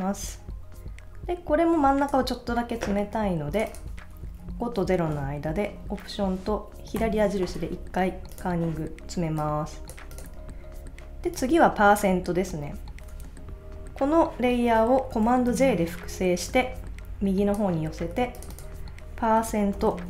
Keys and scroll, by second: 4.3 Left, 4.4 Right, 7.0 alt+Left, 19.7 shift+5.